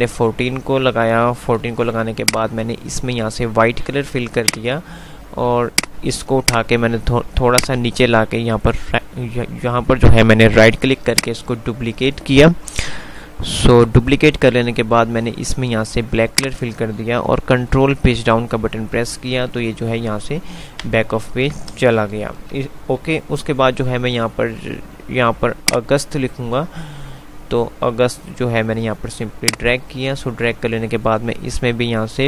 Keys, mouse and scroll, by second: 1.9 F2, 4.5-11.4 drag, 11.0 right click, 16.4 click, 17.7 Page_Down, 22.0 z, 23.0 F3, 25.5-28.5 drag, 28.9 F2, 29.7 click, 29.9 F2.